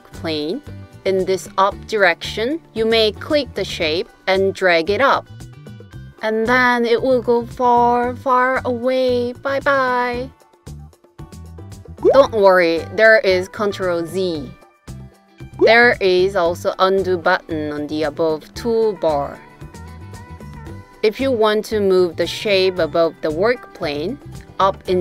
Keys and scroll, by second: 12.8 super+z.